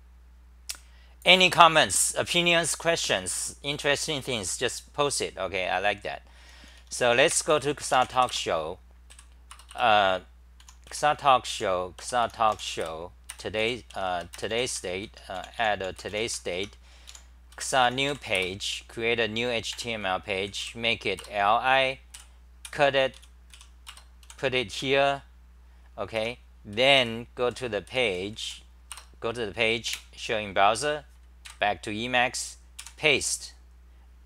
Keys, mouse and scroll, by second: 6.5 t, 6.7 t, 6.8 t, 8.4 Return, 9.1 d, 9.5 Return, 9.7 Return, 10.7 u, 12.0 BackSpace, 14.1 BackSpace, 15.2 Home, 15.4 e, 15.6 e, 15.8 e, 16.6 Home, 17.5 a, 18.7 Return, 19.8 Tab, 21.3 Return, 22.2-24.8 typing, 23.9 Return, 26.3 Home, 27.1-28.4 typing, 29.0 Return, 29.9 super+r, 32.8 k.